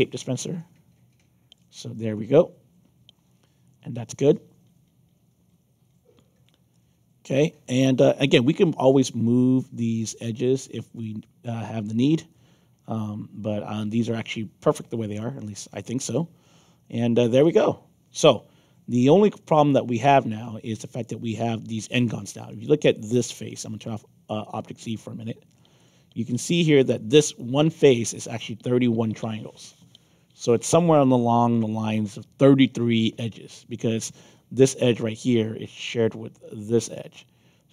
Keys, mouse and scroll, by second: 1.9-6.1 alt+drag, 6.4 middle click, 6.7-8.1 alt+drag, 11.0-13.7 alt+drag, 14.7-16.1 alt+drag, 16.4-16.7 scroll down 2, 17.0 scroll up 1, 17.5-21.0 alt+drag, 21.3 middle click, 22.4 click, 24.4 click, 24.8 click, 25.7 click, 26.4 click, 27.3 alt+click, 33.9 middle click, 34.9 alt+click, 36.4 middle click, 36.9-37.7 right drag.